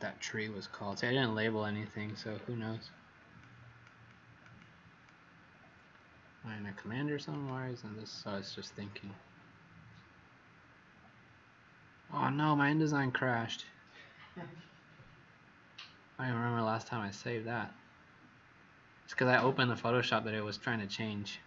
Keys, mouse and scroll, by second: 2.1-2.7 scroll down 7, 3.3 click, 4.0 click, 7.2 click.